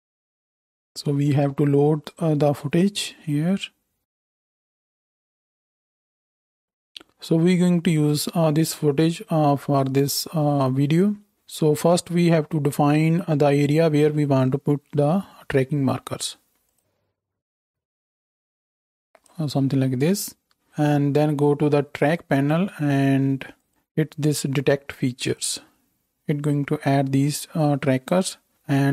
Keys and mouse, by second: 0.8-11.3 drag, 16.7-20.9 drag, 23.6-28.9 drag.